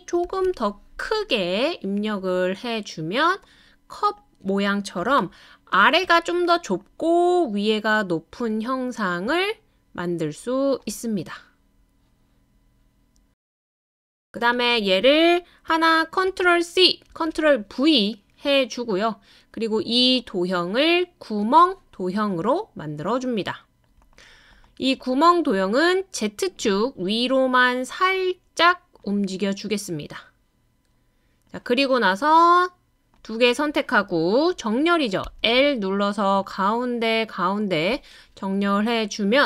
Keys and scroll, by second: 0.0-0.7 typing, 16.3 super+c, 17.1 super+v, 35.2 i.